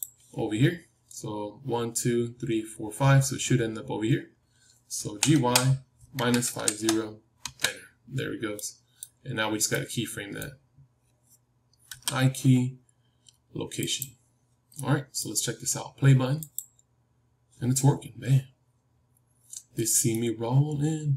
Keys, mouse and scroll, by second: 0.6-3.5 middle drag, 0.6-1.5 scroll up 1, 1.5-3.5 scroll up 1, 5.0 g, 8.5-11.8 middle drag, 11.8 i, 14.7-16.4 middle drag, 16.4-19.0 drag, 20.0-21.1 middle drag.